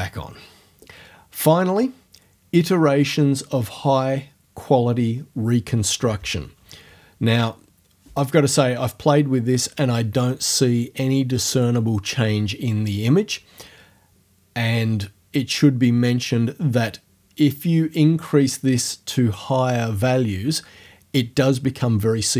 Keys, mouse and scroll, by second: 17.4 click.